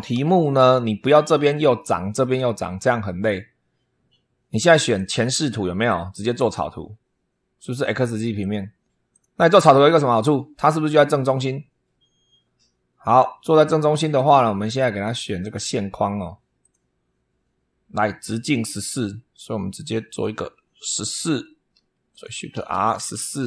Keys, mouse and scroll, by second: 1.5 click, 4.7 click, 6.1 click, 8.2 click, 8.9 click, 9.6-10.8 middle drag, 13.9 click, 15.2 click, 16.4 click, 17.1 scroll up 1, 18.2 click, 19.9 click, 20.6 click, 21.1 Escape, 21.9 click, 22.1-23.4 typing.